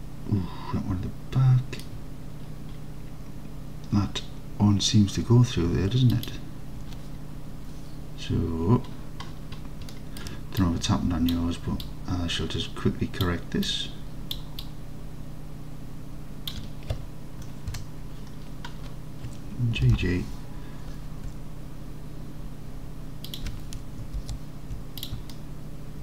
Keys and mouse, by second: 6.2 alt+click, 10.0 middle drag, 10.7-11.4 ctrl+drag, 11.9-13.3 ctrl+drag, 13.9-14.4 ctrl+drag, 14.7-16.5 ctrl+drag, 17.8 KP_Decimal, 19.9 g, 20.0 g, 23.3 shift+click, 24.3 alt+z, 25.4 alt+click.